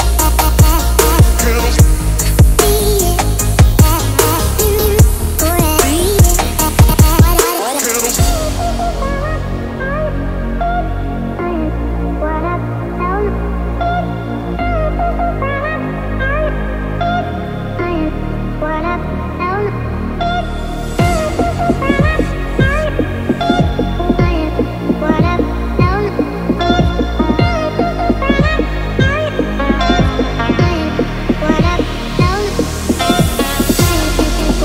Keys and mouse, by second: 1.0 click, 2.0 click, 2.7 middle click, 3.1 Tab, 4.3-6.2 middle drag, 9.1 shift+d, 12.5 Tab, 13.3 click, 15.0 KP_7, 15.7 alt+z, 18.2 ctrl+r, 26.5 ctrl+r, 33.8 KP_1.